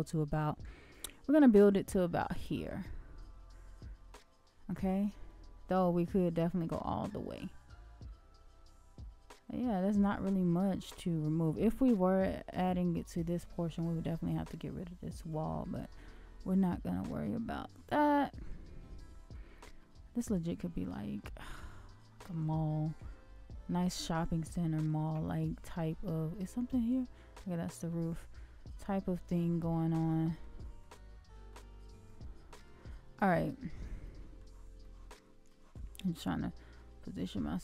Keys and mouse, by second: 0.7-1.1 middle drag, 4.7-5.0 shift+middle drag, 5.2-5.7 middle drag, 6.5-9.8 shift+middle drag, 10.1-12.2 middle drag, 13.1-13.8 middle drag, 14.5 middle drag, 15.5-15.9 middle drag, 16.1-16.9 shift+middle drag, 17.5-19.3 middle drag, 19.8 shift+middle click, 20.6-21.1 middle drag, 21.4-22.8 shift+middle drag, 23.9-24.8 shift+middle drag, 26.1-27.8 shift+middle drag, 28.7-29.2 middle drag, 29.5-30.1 shift+middle drag, 30.8-31.5 middle drag, 32.0 shift+middle click, 33.3-33.7 middle drag, 34.0 shift+middle drag, 34.8 shift+middle drag, 35.5 shift+middle click, 37.2 shift+middle click.